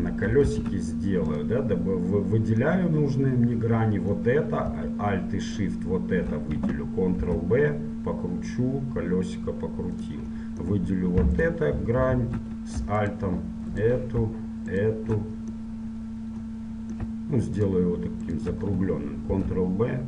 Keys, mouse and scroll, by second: 1.5 ctrl+Tab, 2.9-5.6 middle drag, 5.6-7.5 right drag, 7.5 ctrl+b, 10.4-11.5 middle drag, 11.5-16.8 right drag, 16.8 middle click, 17.7-20.0 right drag, 19.5 ctrl+b.